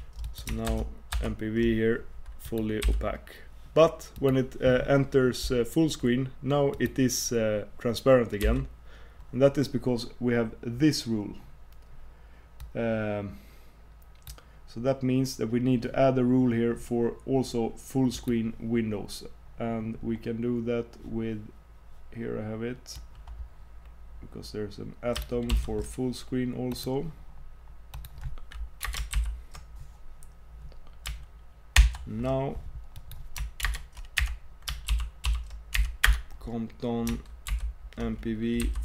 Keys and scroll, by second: 0.7 super+Tab, 8.4 super+Tab, 33.7 super+Return, 37.5 super+m.